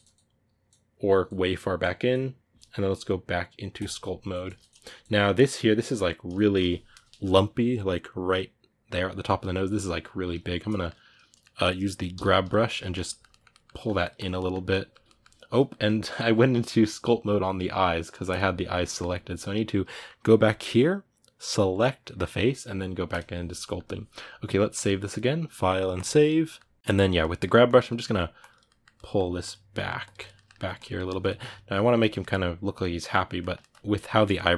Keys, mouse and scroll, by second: 3.6 click, 4.1 shift+middle click, 4.5-5.1 scroll up 4, 4.6 middle click, 5.1-11.9 middle drag, 11.9 g, 12.2-18.1 middle drag, 18.1-22.9 drag, 23.4-26.8 middle drag, 26.8 click, 27.0 middle click, 27.4 click, 27.8 middle click, 28.1 click, 28.4 middle click, 29.2 click, 29.5 middle click, 29.8 click, 30.1 ctrl+middle click, 30.5 click, 30.8-34.5 ctrl+middle drag.